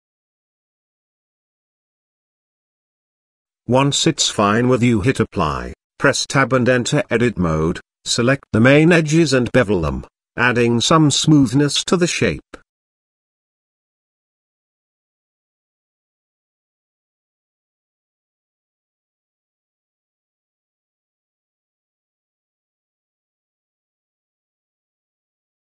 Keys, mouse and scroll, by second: 1.6-3.8 middle drag, 4.3 click, 5.3 Tab, 5.7 middle click, 5.8 ctrl+s, 6.4 ctrl+a, 7.3 Tab, 8.3 click, 9.3 click, 10.1 shift+middle click, 10.6 shift+click, 10.9 shift+middle click, 11.4 ctrl+b, 13.7 shift+click, 13.9 shift+click, 14.2 shift+click, 14.4 shift+middle click, 14.9 middle click, 15.3 shift+click, 15.7 middle click, 16.9 ctrl+z, 17.0 shift+click, 17.5 shift+click, 17.7 shift+middle click, 18.2 shift+click, 18.6 shift+click, 18.7 middle click, 19.5 ctrl+b, 22.0 Tab, 22.6-23.6 middle drag, 23.9 middle click, 25.2 Tab.